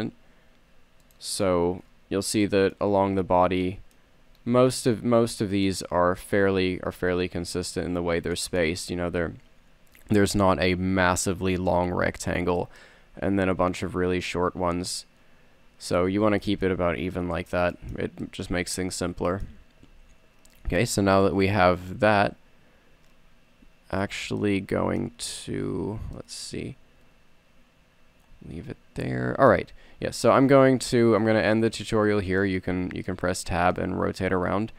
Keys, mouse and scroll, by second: 1.7 click, 2.1-3.1 middle drag, 3.1 scroll down 1, 3.2 middle click, 3.9 middle click, 4.0 scroll up 1, 7.0 a, 7.4 a, 16.3 a, 20.2 z, 21.3 z, 30.0 KP_3, 30.5 KP_1, 32.4 Tab.